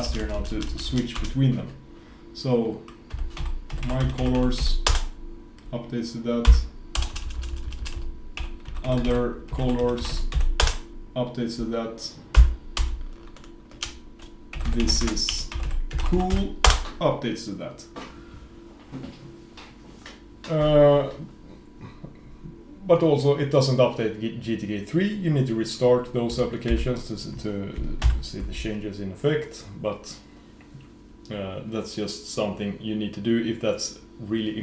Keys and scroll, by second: 27.3 F4, 28.3 shift+super+?.